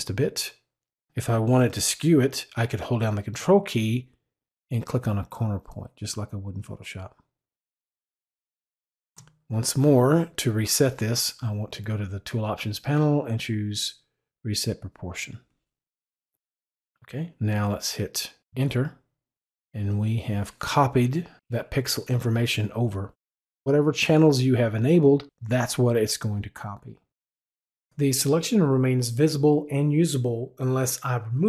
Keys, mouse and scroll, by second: 4.4-9.1 ctrl+drag, 13.7 click, 18.4 Return, 20.3 click, 21.6 click.